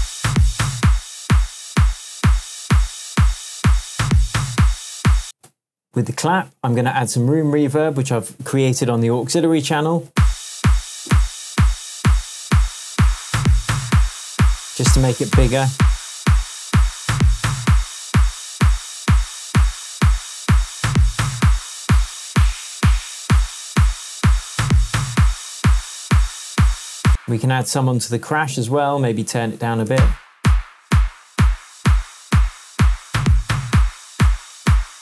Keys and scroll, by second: 5.2 space, 5.4 Tab, 6.7 Tab, 9.3 Tab, 10.1 space, 27.0 space, 29.9 space.